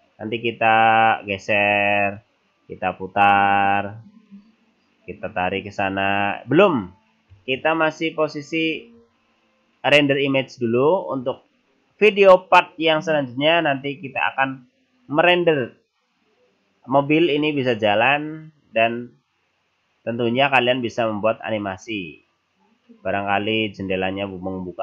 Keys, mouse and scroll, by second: 0.1-0.7 scroll up 3, 0.8 right click, 1.8 click, 3.9 click, 5.3 click, 7.9 ctrl+z, 8.2 ctrl+z, 8.8 ctrl+z.